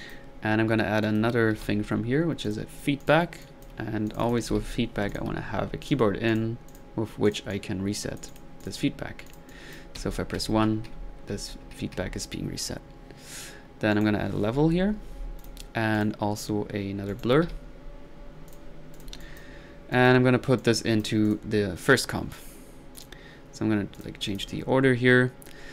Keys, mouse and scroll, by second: 1.0 middle click, 1.1-2.1 typing, 2.5 click, 3.0-3.7 drag, 4.1 click, 4.2-5.0 typing, 5.1 drag, 5.8 click, 6.3-6.6 drag, 6.7 click, 7.3 click, 7.5 click, 8.6 drag, 9.0-10.2 drag, 10.0-12.0 typing, 11.3-11.8 middle drag, 13.9 right click, 14.3-15.0 typing, 15.4 click, 16.0 click, 17.1 right click, 17.5 b, 18.5 click, 18.5 b, 19.0-19.5 drag, 20.1 drag, 20.6-21.1 drag, 21.3 drag, 24.0 click, 24.3 click.